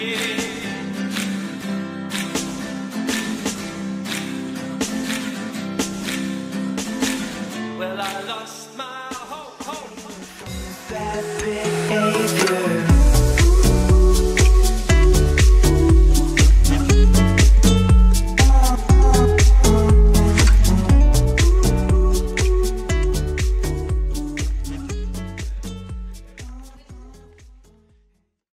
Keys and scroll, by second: 1.6 b, 2.3 b, 5.0 b.